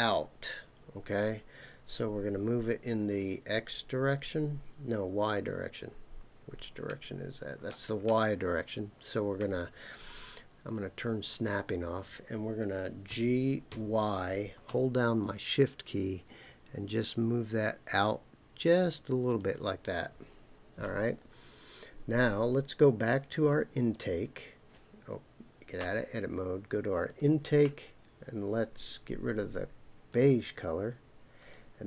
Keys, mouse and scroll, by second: 5.8-7.5 scroll down 5, 7.5 scroll down 1, 9.1-11.2 scroll down 2, 11.2 click, 13.1 g, 13.7 y, 19.3 shift+click, 23.9 click, 25.8 Tab, 27.0 click, 30.1 click, 31.4-31.8 drag.